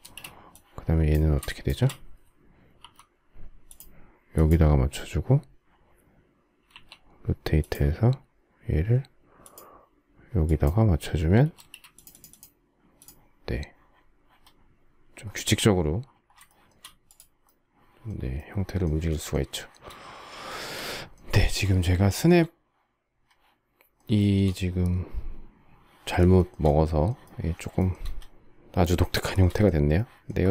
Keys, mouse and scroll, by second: 1.2 shift+click, 2.5 m, 11.2 space, 16.2 shift+middle click, 19.3 shift+middle click, 20.2 shift+middle click, 21.1 shift+middle click, 22.0 shift+middle click, 23.9 shift+middle click, 26.1 shift+middle click, 27.5 shift+scroll, 27.6 shift+middle click, 28.9 shift+middle click, 30.3 shift+middle click.